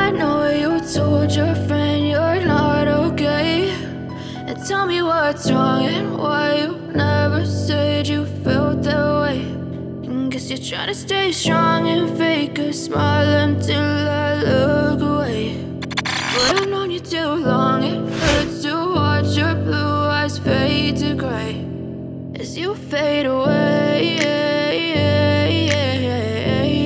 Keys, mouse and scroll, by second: 2.4 click, 5.1 click, 6.4 click, 7.9 click, 9.9 Delete, 10.3 click, 14.9 click, 16.3 click, 20.5 click, 23.5 click, 24.6 scroll up 1, 25.5 scroll down 1, 26.2 click.